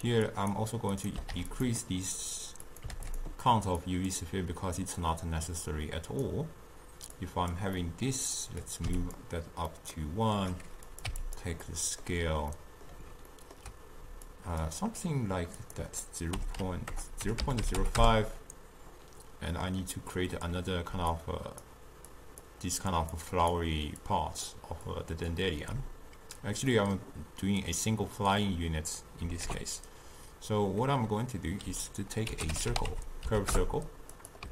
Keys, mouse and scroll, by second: 6.3-34.5 drag.